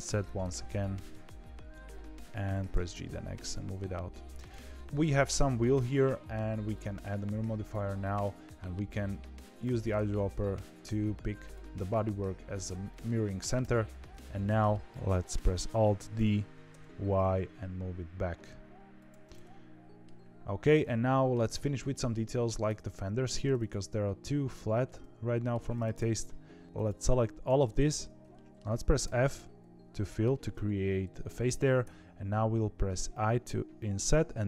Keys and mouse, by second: 0.3 KP_3, 1.0 KP_1, 2.6 g, 4.4 middle click, 4.7 Tab, 6.7 click, 7.9 middle click, 12.8 middle click, 13.5 KP_3, 14.3 shift+middle click, 16.1 alt+d, 19.2 middle click, 20.6 click, 21.0 shift+middle click, 21.8 shift+middle click, 22.6 Tab, 23.2 2, 23.5 click, 24.8 middle click, 25.9 KP_3, 28.3 shift+middle click, 29.0 f, 29.9 shift+middle click, 31.8 i.